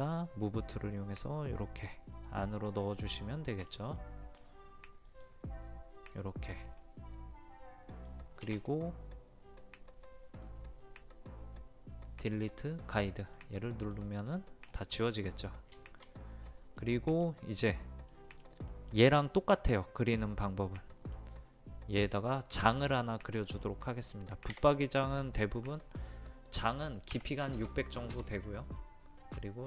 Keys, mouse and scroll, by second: 2.5-3.9 middle drag, 5.0 click, 6.5 scroll down 1, 7.1-8.9 middle drag, 8.9 space, 10.2 click, 13.4 middle click, 14.8 scroll up 1, 15.0 middle click, 15.8 shift+middle click, 16.4-16.8 scroll up 1, 16.8-21.9 middle drag, 23.1-23.7 scroll up 1, 24.5 t, 24.9 click, 27.1 KP_6, 27.3 KP_0.